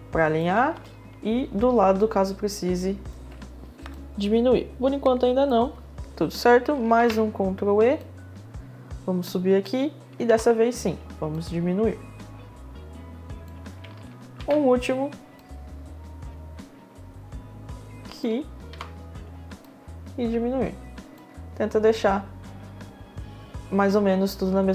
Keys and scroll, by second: 0.3 space, 6.5 ctrl+e, 9.8 ctrl+e, 10.8 r, 16.0 e, 18.2 e, 19.1 r.